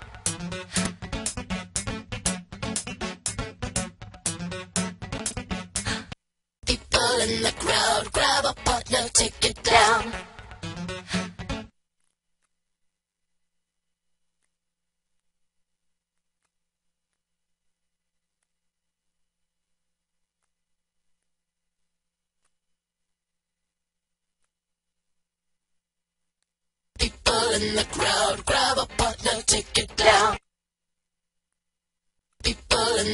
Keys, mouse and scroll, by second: 25.7 click.